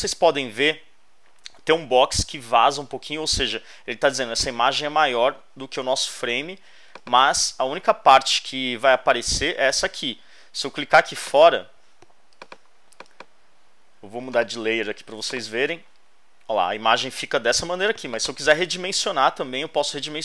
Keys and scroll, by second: 19.4 super+t.